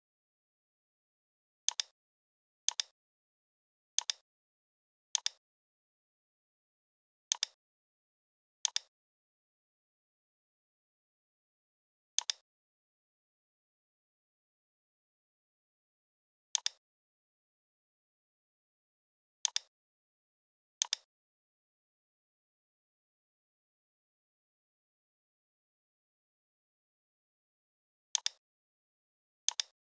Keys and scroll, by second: 24.1 p.